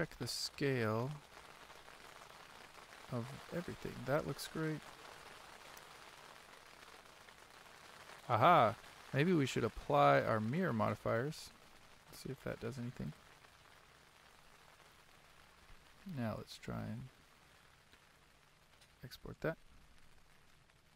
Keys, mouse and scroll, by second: 0.7-10.1 click, 10.1-20.7 drag.